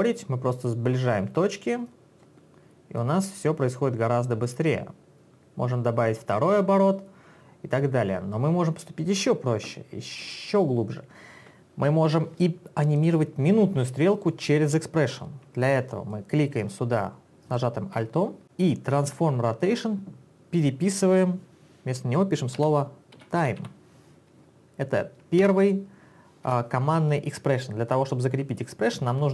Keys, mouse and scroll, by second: 3.0 click, 10.2 click, 13.0 click, 17.6 alt+click, 22.6-24.1 typing, 25.4 Return, 26.6 BackSpace.